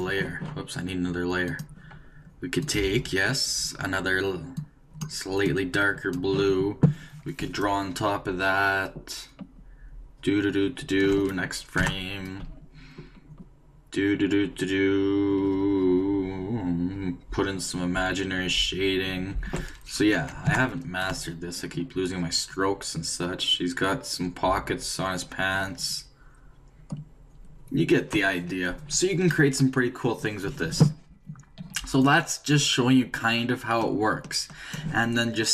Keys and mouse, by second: 1.5-4.3 drag, 7.4-10.1 d, 10.2-11.8 drag, 11.0 d, 11.1 d, 11.8 Right, 12.4-14.8 d, 14.8-16.7 drag, 19.2-28.2 typing, 20.4 Right, 24.5-28.2 drag, 32.0-33.9 drag.